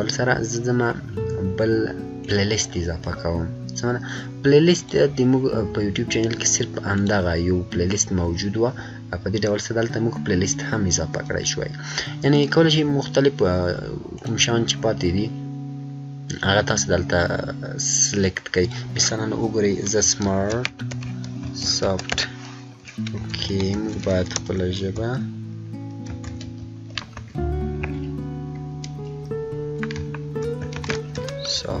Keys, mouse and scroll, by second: 2.1 click, 2.2 click, 6.0 click, 6.9 click, 12.3 click, 12.3 click, 18.6 click, 19.7-22.5 typing, 23.2 ctrl+a, 25.8-28.5 typing, 30.4-31.8 typing.